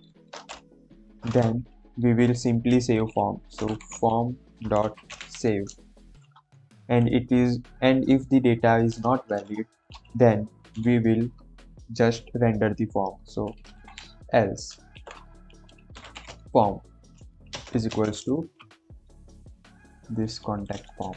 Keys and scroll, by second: 0.0 shift+9, 1.0 shift+;, 1.2 Return, 3.5-5.9 typing, 9.0 Return, 9.2 BackSpace, 11.2 BackSpace, 13.4-17.8 typing, 15.1 Return, 20.8 ctrl+c.